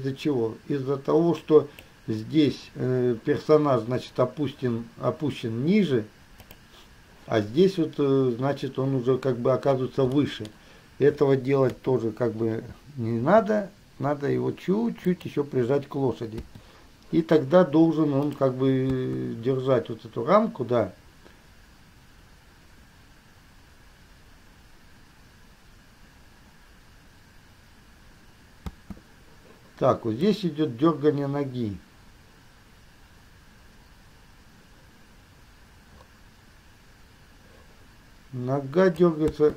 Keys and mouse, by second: 6.6 click, 10.3-11.9 middle drag, 11.9 KP_3, 13.5 r, 16.6 i, 18.5 middle click, 19.0 space, 28.9 space, 30.5-39.3 drag, 39.4 space.